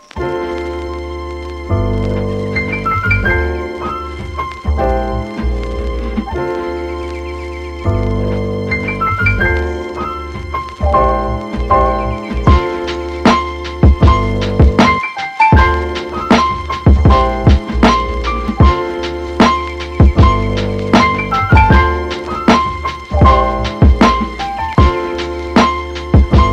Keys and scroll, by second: 7.9 f, 10.2 Right, 10.3 BackSpace, 20.8 Return, 21.5 Return, 25.4 super++.